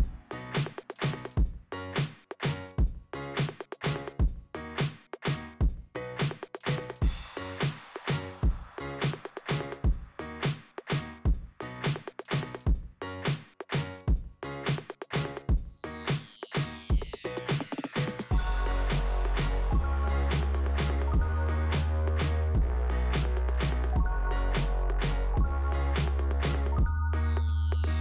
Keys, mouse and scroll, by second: 2.2 click, 2.8 click, 4.5 click, 6.3 click, 11.9 click, 14.0 click, 17.0 click, 18.4 scroll up 2, 22.0 click, 22.3 right click, 23.3 click, 25.3 click, 27.1 click, 27.8 scroll down 2.